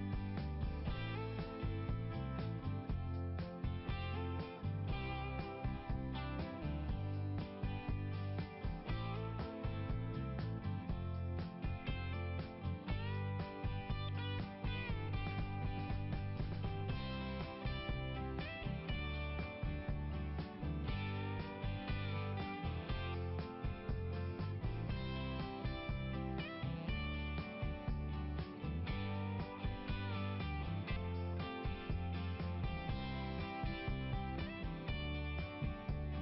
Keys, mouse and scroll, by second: 4.5 click, 4.6 click, 4.9 click, 7.8 click, 8.1 click, 8.7 right click, 9.0 right click, 9.3 right click, 15.9 click, 17.2 click, 17.6 right click, 18.6 click, 19.5 right click, 19.6 click, 19.6 right click, 19.9 right click, 21.5 click, 23.8 click, 24.2 right click, 24.3 double right click, 26.0 click, 26.3 click, 26.6 click, 28.7 right click, 29.0 right click, 30.2 click, 32.6 click, 34.4 click, 35.0 click.